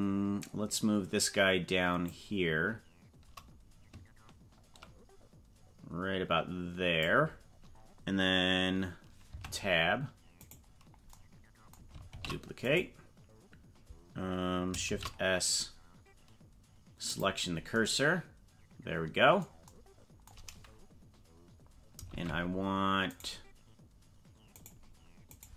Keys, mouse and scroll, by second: 2.2-7.0 drag, 9.3 Tab, 10.5 right click, 12.1 shift+d, 14.8 shift+s, 22.1 ctrl+Tab, 24.5 right click, 25.3 right click.